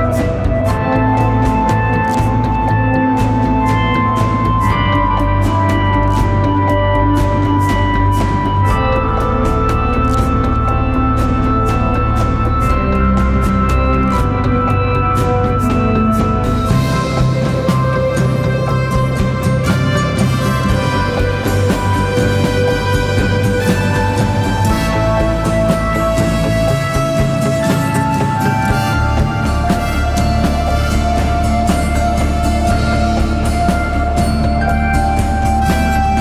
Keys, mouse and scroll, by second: 2.2 double click, 8.8 alt+shift+click, 9.6 alt+shift+i, 15.4 alt+shift+click, 31.2 Return.